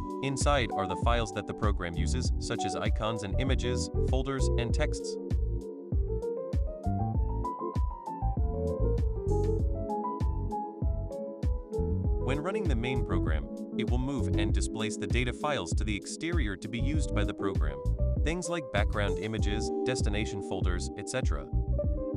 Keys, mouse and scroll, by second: 8.9 click, 11.7 click, 11.9 click, 18.2-19.2 drag.